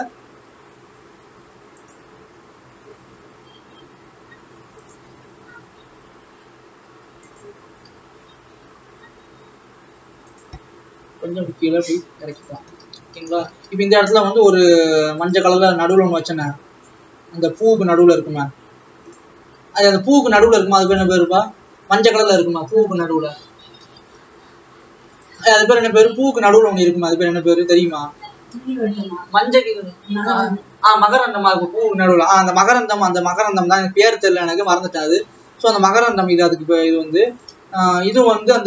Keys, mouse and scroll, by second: 7.8 s, 11.1 g, 12.6 alt+a, 15.4 shift+a, 15.8 scroll down 3, 16.1 s, 18.2 s, 19.4 scroll up 2, 20.3 s, 21.2 s, 23.4 s, 26.1 alt+a, 26.8 click, 28.1-30.8 scroll up 3, 33.5 click, 35.0 click, 36.1 click, 37.5 shift+s, 38.0 alt+a.